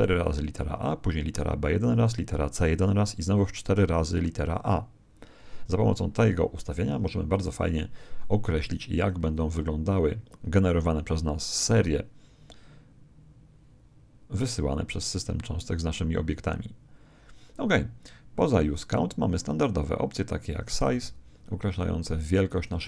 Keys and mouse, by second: 18.3 click, 20.9 alt+a.